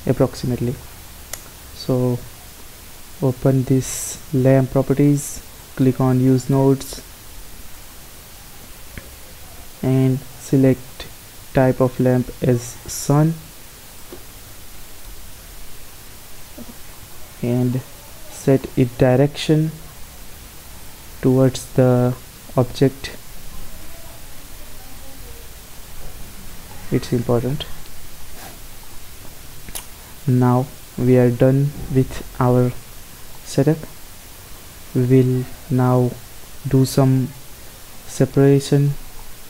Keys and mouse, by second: 2.3-4.2 drag, 5.6-7.3 drag, 7.9 click, 9.7-12.8 middle drag, 15.9-17.2 middle drag, 17.7 middle click, 19.9 r, 23.5 r, 26.3-28.9 middle drag, 30.6-33.8 middle drag, 35.0-36.8 drag, 36.8-38.0 middle drag, 38.5-39.4 middle drag.